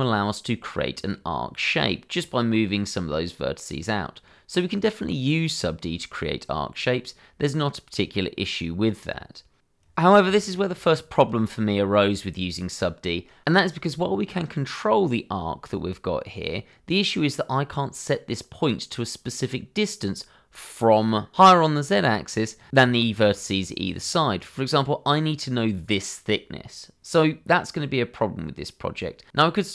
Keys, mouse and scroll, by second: 2.2 click, 3.4 Escape, 3.9-6.1 typing, 4.3 click, 4.8 click, 7.7 middle click, 8.2 click, 8.3 Escape, 8.3 middle click, 8.5 click, 8.9 shift+middle click, 9.1 /, 9.4 shift+middle click, 9.5 g, 9.8 x, 10.0 z, 10.4 click, 10.5 shift+middle click, 10.6 ctrl+z, 10.9 click, 11.1 shift+click, 11.4 s, 11.5 y, 11.6 x, 12.0 click, 12.4 shift+click, 13.2 x, 13.2 click, 13.3 Tab, 13.4 click, 13.5 middle click, 13.8 middle click, 14.0 shift+middle click, 14.1 middle click, 15.2 click, 15.2 shift+middle click, 15.3 scroll up 1, 15.4 shift+middle click, 15.5 click, 15.7 Tab, 15.9-16.5 scroll up 2, 16.2 click, 16.5-18.6 typing, 16.6 click, 16.7-17.4 scroll down 1, 21.7 Escape, 23.0 click, 23.5 ctrl+z, 23.6 click, 28.5 ctrl+z, 29.5 middle click.